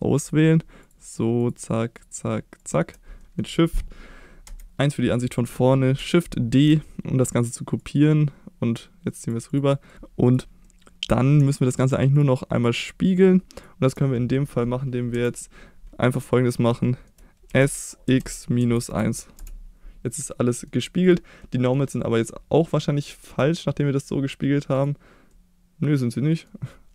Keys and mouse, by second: 0.0 middle click, 0.9 click, 1.4 shift+click, 2.0 shift+click, 2.6 shift+click, 3.2 middle click, 4.5 KP_1, 6.3 shift+d, 6.6 shift+click, 7.8-9.3 drag, 9.5 click, 9.9 click, 10.7-11.2 middle drag, 12.2 shift+click, 12.8 shift+click, 13.6 shift+click, 14.2 middle click, 15.1 KP_1, 16.9 shift+middle drag, 17.5 s, 18.1 x, 18.6 -, 18.9 1, 19.4 Return, 20.3-20.7 middle drag, 21.1 click, 21.5-21.8 middle drag, 23.4-25.1 drag, 25.3-26.5 middle drag.